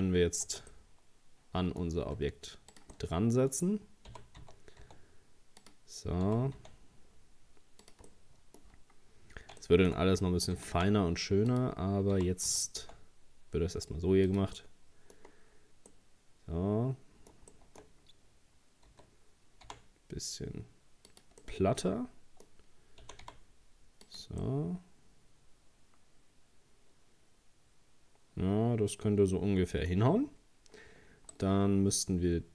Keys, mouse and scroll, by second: 0.5 Tab, 0.7-2.0 middle drag, 2.0 s, 2.9-4.1 middle drag, 4.1 g, 6.3 g, 8.1 middle click, 8.8-9.5 scroll up 4, 9.6 shift+middle click, 10.6 g, 12.1 g, 14.6 middle click, 15.2-15.9 scroll down 5, 15.9-17.8 middle drag, 17.8-18.2 scroll up 1, 18.9 s, 21.4-23.0 middle drag, 23.0 g, 24.4-27.5 middle drag, 30.2 scroll up 1, 31.3 right click.